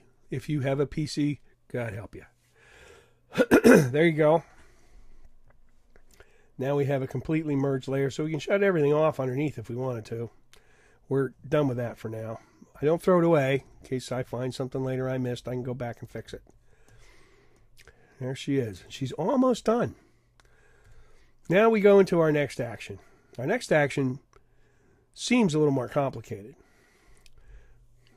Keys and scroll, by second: 13.7 super+=, 20.9 super+0.